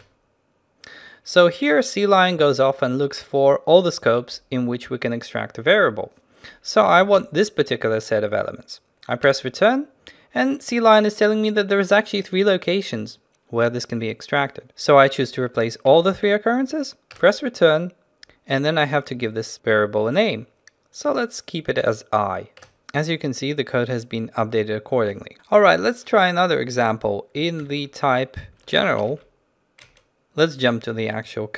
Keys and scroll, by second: 27.7 ctrl+n, 30.8 ctrl+b.